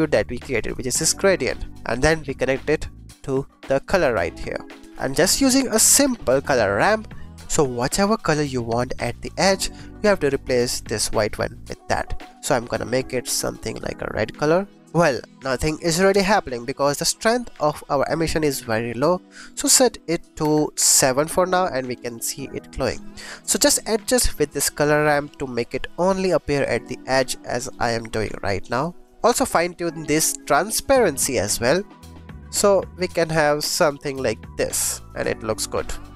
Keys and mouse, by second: 0.6 click, 1.0 shift+d, 1.4 click, 1.7 click, 2.5-3.8 drag, 4.8 shift+a, 6.7 click, 10.4 click, 12.2 click, 14.8 ctrl+z, 15.1-16.6 drag, 18.0-20.8 drag, 23.0 click, 24.3-26.0 drag, 27.5-28.8 drag, 29.1 click, 29.2-29.7 middle drag, 29.7 click, 30.8 click, 31.0 middle click, 31.8-34.3 drag.